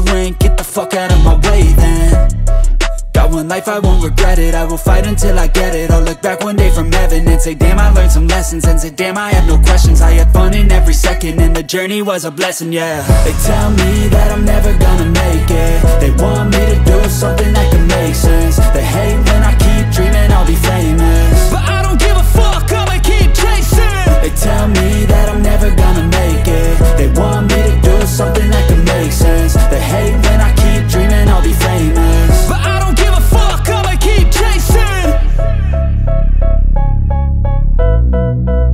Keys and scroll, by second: 6.8 g, 6.8 z, 7.3 s, 9.5 s, 10.6 s, 12.3 g, 12.3 z, 13.3 Escape, 13.4 s, 15.6 g, 15.7 z, 23.5 s, 23.8 Escape, 24.3 s, 25.3 g, 25.4 z, 30.7 g, 32.9 Escape, 33.2 s.